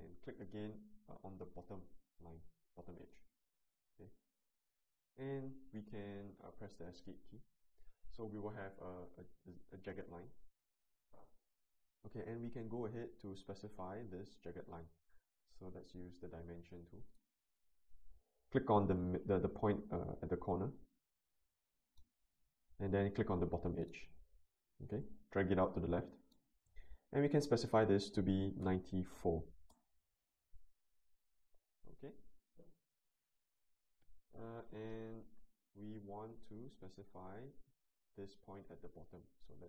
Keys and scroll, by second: 7.1 Escape, 28.6-29.1 typing, 29.6 Return.